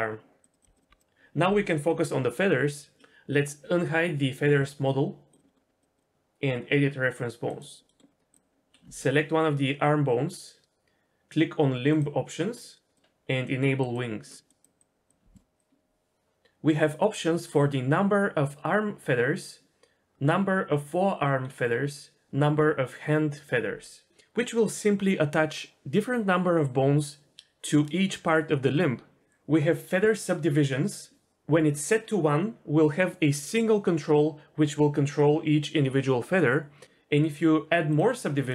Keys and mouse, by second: 0.5 r, 0.6 r, 0.8 click, 0.9 r, 5.3 click, 5.4 middle click, 5.9-7.4 drag, 7.6 click, 7.9 middle click, 12.0-38.5 drag.